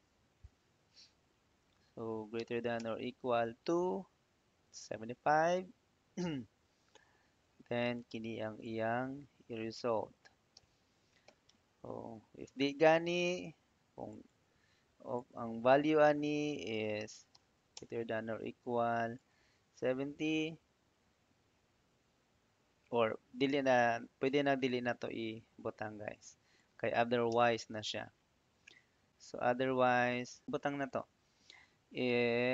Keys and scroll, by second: 2.2 shift+., 2.6 =, 7.1 ', 10.4 ', 11.1 i, 11.4 f, 12.3 Tab, 17.2 shift+., 17.6 =, 20.2 ', 27.1 BackSpace.